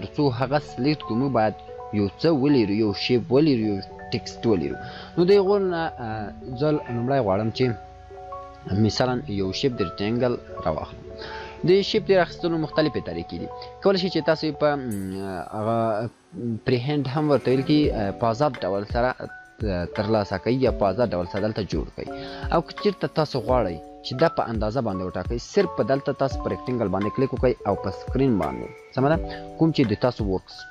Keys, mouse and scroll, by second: 5.3 click, 9.5 right click, 14.0 click, 14.1-21.9 click.